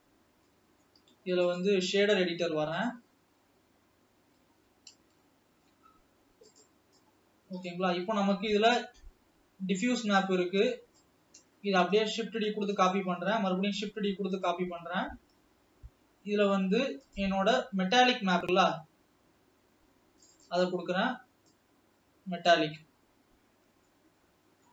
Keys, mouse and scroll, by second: 0.6 middle click, 1.6-3.7 drag, 3.7-4.4 scroll up 2, 4.8 n, 5.5-7.1 shift+middle drag, 7.1-11.9 drag, 11.9 shift+d, 13.4 shift+d, 15.6-18.6 scroll up 1, 21.5-22.9 drag, 23.6 scroll up 3, 24.0 scroll down 1, 24.4-24.7 middle drag.